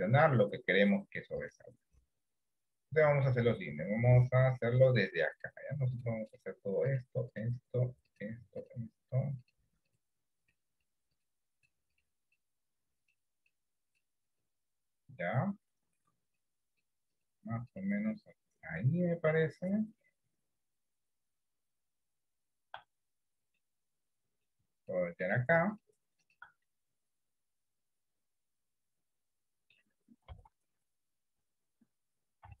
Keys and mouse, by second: 0.5 click, 23.7 middle click, 26.8-29.9 middle drag, 30.5 KP_1, 31.5 KP_3.